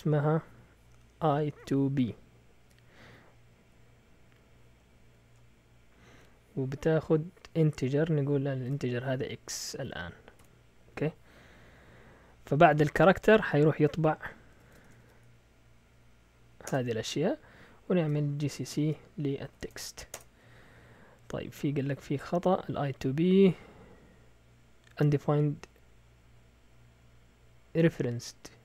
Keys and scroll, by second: 1.0-2.6 typing, 5.0 typing, 8.6 shift+x, 9.7 Right, 10.4 ;, 14.5 Escape, 14.6-15.5 typing, 16.6 Return, 17.8-20.0 typing, 20.1 Return.